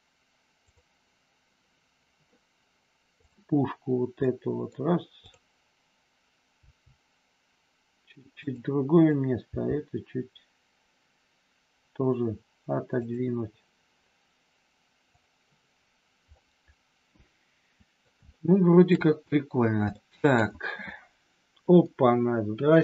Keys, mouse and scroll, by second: 0.7 click, 3.2 click, 4.2 middle click, 5.3 click, 6.5 g, 8.4 click, 8.9 click, 9.5 g, 13.0 click, 15.0 click, 16.3-18.0 middle drag, 18.3 shift+middle click, 19.9 shift+middle click, 20.3 scroll down 1, 21.8-22.8 middle drag.